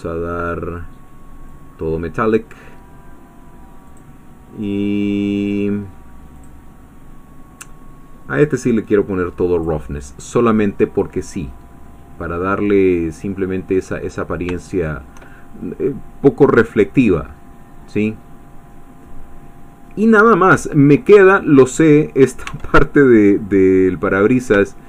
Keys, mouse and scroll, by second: 1.5-2.5 drag, 3.9 click, 6.5 click, 8.4-9.9 drag, 9.9-14.1 middle drag, 14.1-14.5 scroll up 1, 14.7 shift+middle click, 15.7-20.3 middle drag, 20.5 shift+scroll down 1, 20.7 shift+middle click, 21.9 shift+click, 22.6 Tab, 22.9-24.3 middle drag, 24.3 scroll up 2, 24.7 shift+middle click.